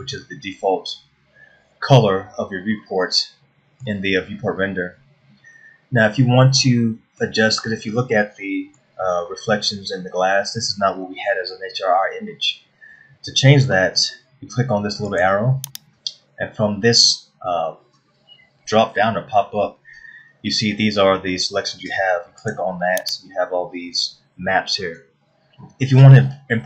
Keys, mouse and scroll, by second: 3.4 middle click, 7.2 middle click, 8.2 scroll up 1, 8.8 middle click, 15.7 click.